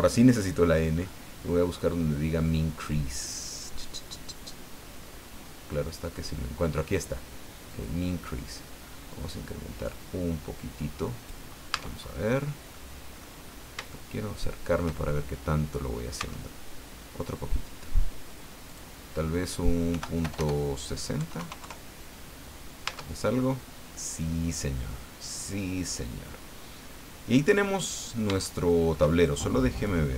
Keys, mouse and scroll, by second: 1.0 scroll up 2, 6.1-6.4 scroll up 2, 7.7-11.4 drag, 11.7 Tab, 12.7 middle click, 13.5-13.8 scroll up 3, 13.9-15.0 shift+middle drag, 16.2 Tab, 18.7 click, 19.9 End, 20.2 BackSpace, 21.2 KP_6, 21.4 KP_0, 21.6 KP_Enter, 22.9 Tab, 23.4-23.7 scroll down 1, 23.9-28.1 middle drag, 28.4 shift+middle click, 29.7 click.